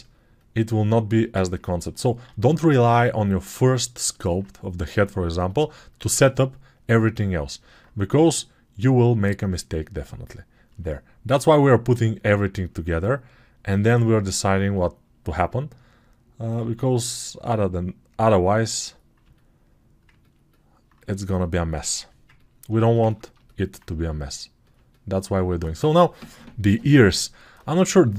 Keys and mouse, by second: 1.4 ctrl+alt+click, 2.2 alt+q, 2.4 alt+click, 12.3-23.1 alt+shift+drag, 16.6 alt+q.